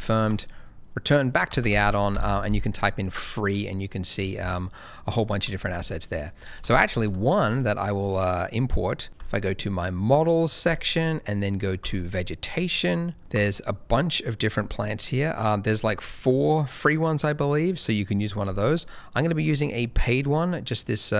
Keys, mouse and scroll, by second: 0.3 alt+Tab, 0.9 click, 1.5 f, 1.7 r, 1.8 e, 2.1 Return, 3.0 middle click, 7.6 shift+right click, 7.8 shift+middle click, 8.7 click, 9.0 double click, 9.1 click, 12.5 middle click, 13.2-14.5 scroll up 1, 14.5 click, 17.0 middle click, 21.0 click.